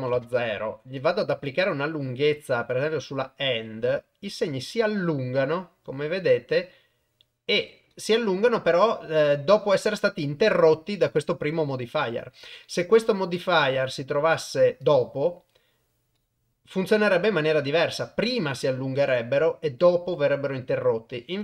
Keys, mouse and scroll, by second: 1.0 click, 2.7-7.9 drag, 9.5 click, 12.8 click, 14.8-16.1 drag.